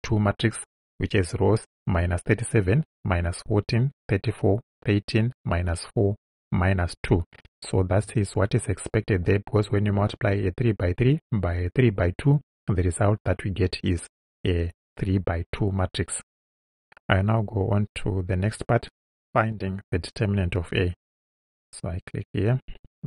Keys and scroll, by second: 21.4 Return.